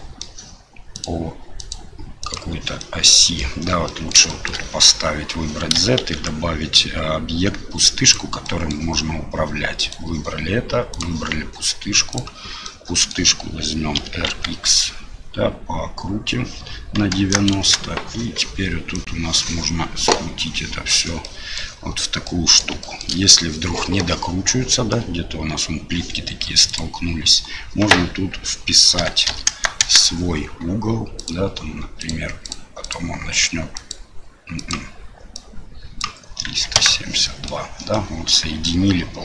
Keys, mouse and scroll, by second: 0.9 click, 1.6 click, 2.2 click, 2.8-3.4 middle drag, 3.8 middle drag, 4.3 shift+middle drag, 6.0 shift+a, 8.4 middle drag, 11.0 click, 12.6 middle click, 14.0 r, 19.0-20.9 drag, 21.2-21.5 middle drag, 22.2-22.6 middle drag, 22.8 shift+middle drag, 24.7 middle drag, 26.7-30.3 drag, 31.2-32.9 drag, 33.7 click, 34.6-36.9 drag, 37.2 middle drag, 37.9-38.6 middle drag.